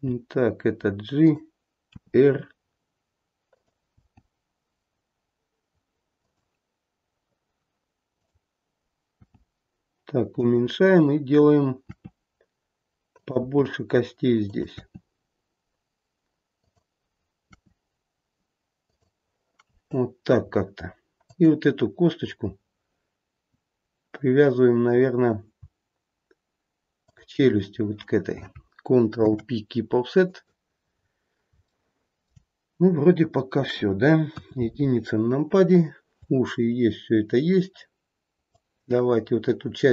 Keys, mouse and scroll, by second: 1.8 r, 3.9 g, 8.1 click, 9.1 g, 11.8 e, 13.3 e, 17.5 e, 21.2 click, 22.5-24.2 scroll down 1, 24.2-24.7 scroll down 1, 27.0 shift+click, 29.2 ctrl+p, 30.8-31.5 scroll down 3, 31.8 shift+middle click, 34.3 KP_1, 38.5 click.